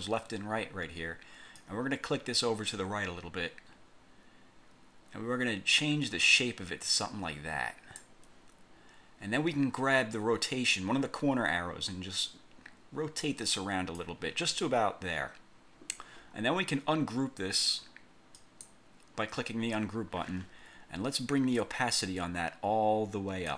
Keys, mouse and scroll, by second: 1.7-8.3 drag, 12.0-14.3 drag, 18.5 click, 21.7-23.5 drag.